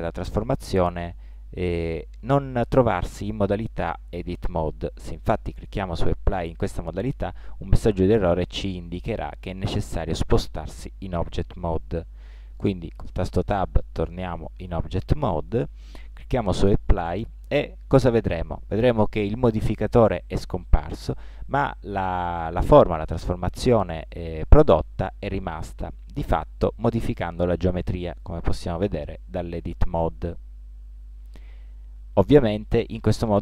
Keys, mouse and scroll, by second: 5.7-7.5 drag, 13.1 Tab, 17.1-18.8 drag, 26.0 Tab, 26.6-29.9 middle drag, 30.6 middle click.